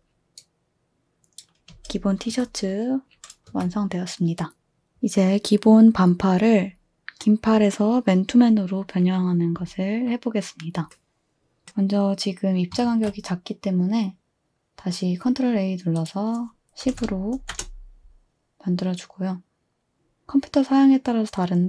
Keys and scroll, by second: 1.7-2.3 typing, 3.4 2, 12.9 ctrl+a, 16.6-17.5 typing.